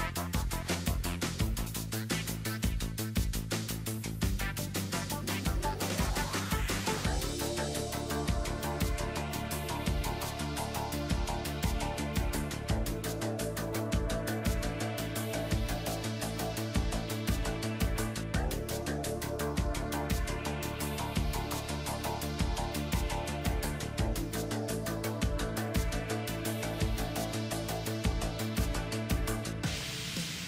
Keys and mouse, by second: 0.2 z, 1.1 ctrl+s, 6.8 ctrl+s, 7.7 click, 13.1-17.5 right drag, 16.4 x, 18.7 b, 20.1-21.9 drag, 21.5 ctrl+z, 21.9 b, 22.8 b, 23.7-25.8 drag, 25.0 ctrl+s, 26.3-28.2 drag, 27.9 ctrl+z, 28.2 KP_7, 28.6 z, 29.8 e.